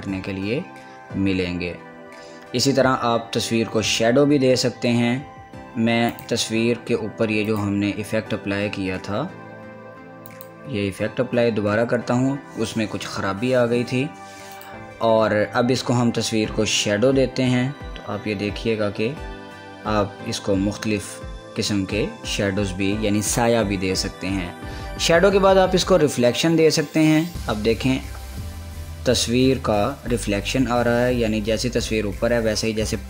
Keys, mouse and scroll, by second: 6.3 click, 10.5 click, 14.7 click, 15.7 click.